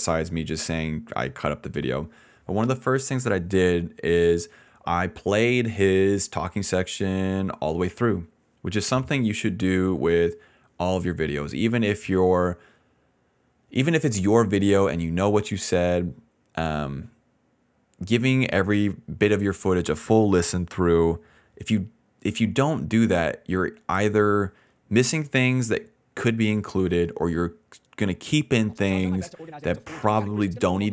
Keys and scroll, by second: 28.4 d, 28.6 space.